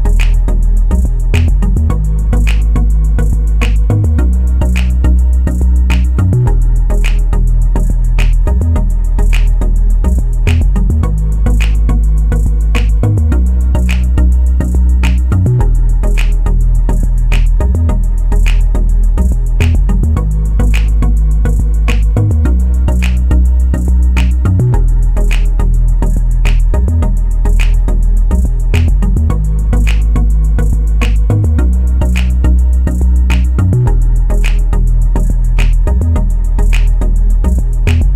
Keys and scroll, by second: 8.4 ctrl+z, 10.3 Escape, 17.3-18.1 typing.